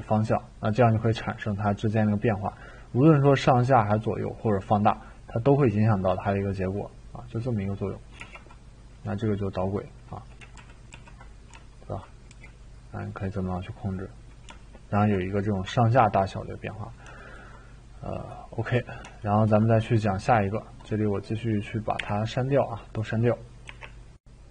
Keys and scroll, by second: 8.1 t, 10.5 ctrl+z, 10.9 ctrl+z, 12.3 e, 21.9 Delete, 23.7 Delete.